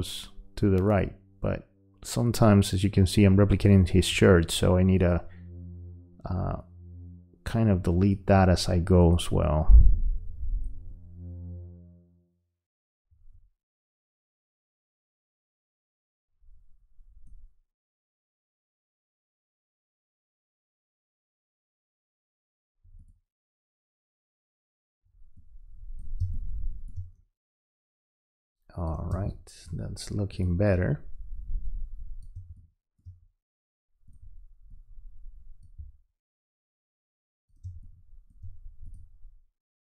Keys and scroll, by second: 26.2 space, 29.1 space, 32.4 space, 37.6 space.